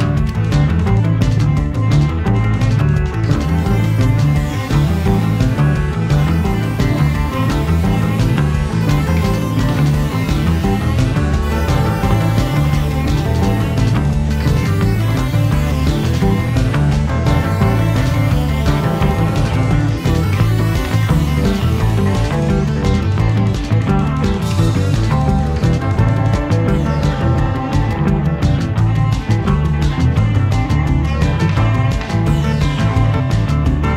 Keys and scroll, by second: 0.4 Escape, 5.7 Escape, 11.9 Escape, 12.7 d, 18.5 4, 18.9 Return, 21.4 Escape, 26.8 4, 27.0 ., 27.1 5, 27.6 Return, 29.2 4, 29.3 ., 29.4 4, 29.7 Return, 33.8 4.